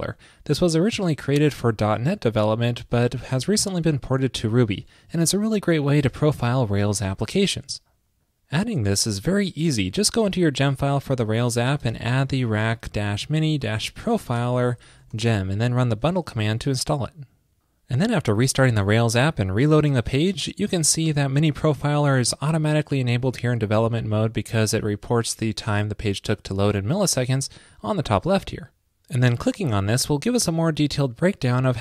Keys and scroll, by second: 16.3 super+Right, 16.4 super+s.